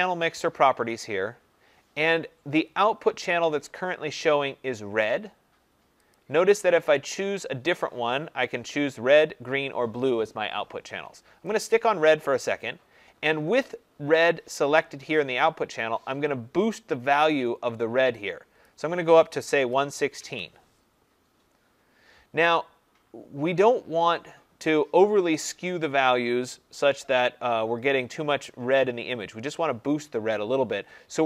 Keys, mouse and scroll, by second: 6.1 click, 11.5 click, 18.6-23.7 drag, 19.6-20.2 1.